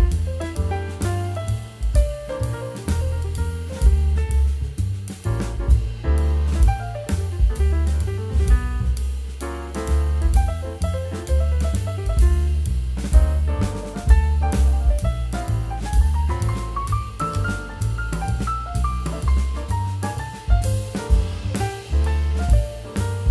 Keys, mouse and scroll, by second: 3.9 right click, 11.8 scroll down 1, 12.0 middle click.